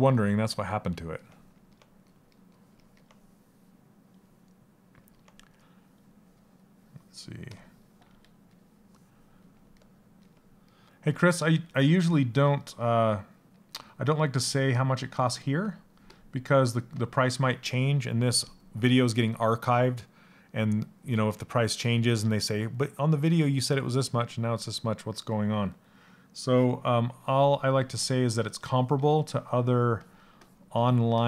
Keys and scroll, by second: 7.6 s, 27.5 s, 28.5 s.